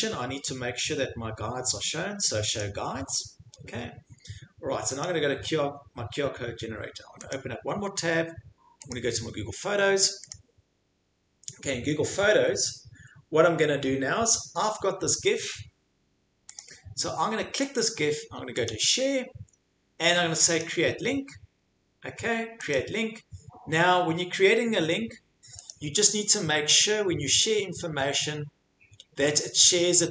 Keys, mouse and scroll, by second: 2.6 click, 5.0 click, 7.3 click, 8.9 click, 10.3 click, 16.6 click, 18.6 click, 20.6 click, 22.7 click, 25.7 click, 27.4 click, 29.4 click.